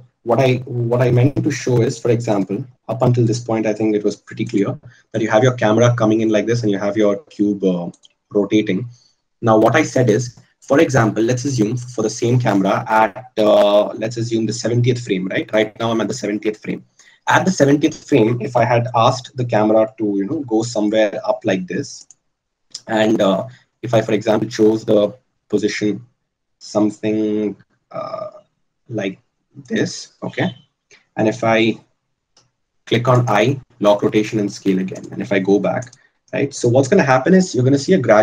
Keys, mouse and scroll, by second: 13.0-15.9 drag, 20.2 g, 23.5 r.